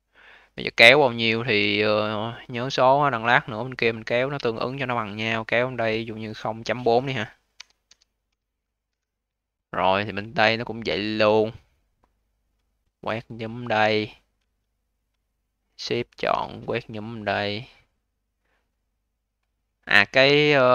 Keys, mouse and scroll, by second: 1.0 click, 6.0-9.0 drag, 9.8 click, 10.2 alt+click, 10.8 alt+middle click, 11.3-12.8 alt+drag, 14.0 alt+middle click, 14.6 alt+click, 16.5-19.3 alt+drag, 19.3 alt+middle click, 19.7-20.7 alt+drag.